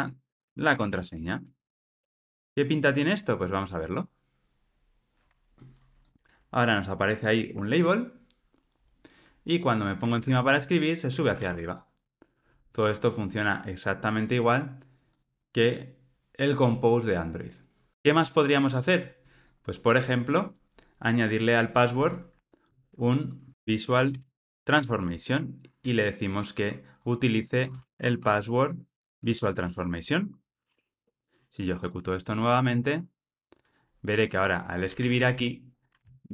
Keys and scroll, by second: 2.4 alt+super+p, 7.3 ctrl+r, 24.7 Return, 29.3 Return.